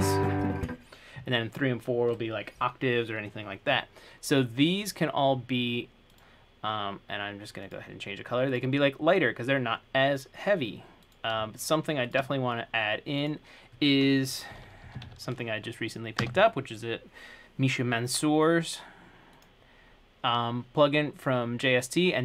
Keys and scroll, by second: 14.5-15.7 typing, 16.4 Return.